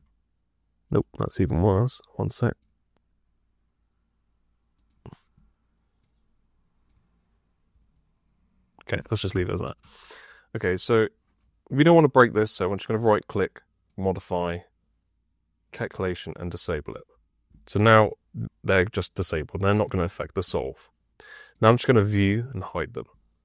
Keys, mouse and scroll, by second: 0.8 right click, 1.5 click, 2.4 click, 4.6 click, 5.9 click.